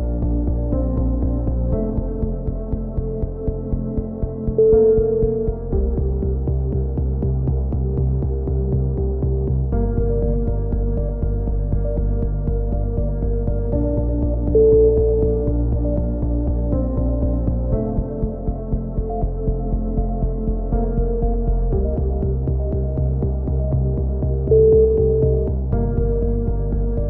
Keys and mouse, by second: 0.6 middle click, 2.6-3.7 drag, 3.7 z, 3.9-5.0 drag, 5.5 right click, 6.2 click, 6.2 f, 6.4 a, 6.6 z, 6.8 click, 9.9 KP_3, 10.2 middle click, 10.6 z, 12.8-14.1 drag, 14.9 click, 15.5 middle click, 17.2 z, 17.6 z, 17.8 a, 18.1 z, 18.4 middle click, 20.6-21.7 right drag, 21.6 click, 21.7 middle click, 21.9 click, 22.1 middle click, 22.3 z, 22.4 click, 22.6 right click, 23.0 f, 23.2 a, 23.4 click, 24.6-25.6 drag, 25.0-26.1 right drag, 26.0 f, 26.1 a, 26.3 z.